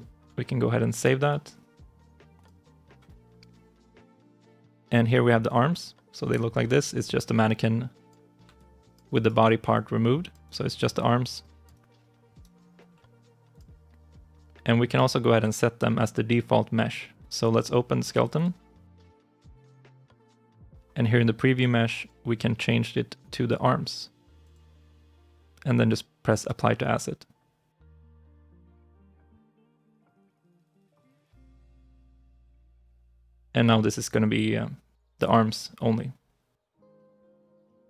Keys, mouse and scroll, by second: 5.4 double click, 8.4 alt+click, 9.0 alt+right click, 9.6 alt+click, 10.3 alt+right click, 10.6 alt+click, 11.6 alt+right click, 18.2 double click, 32.0 ctrl+shift+s.